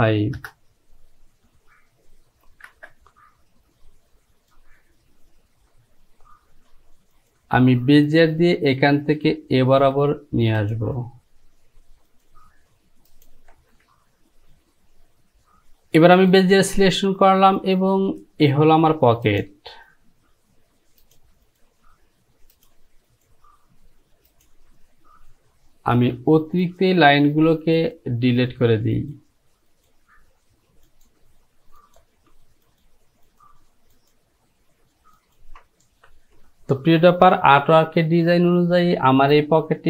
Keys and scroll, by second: 0.4 Return, 2.7 Return, 26.1 Delete.